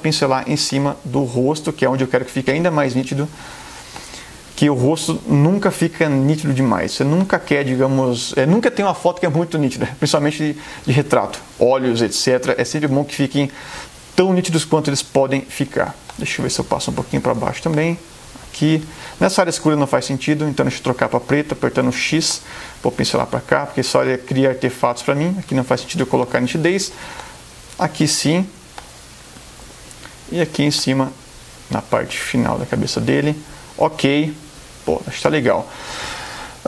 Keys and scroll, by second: 3.1 [, 16.0 space, 20.2 x, 26.2 space, 28.7 space.